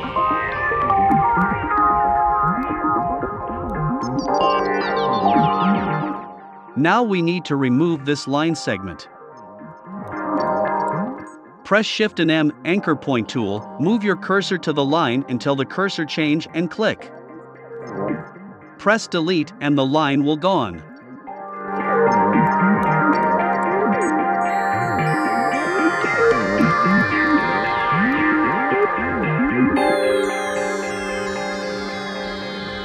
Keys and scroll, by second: 13.0 BackSpace, 23.7 shift+c, 24.8 BackSpace, 27.2 =.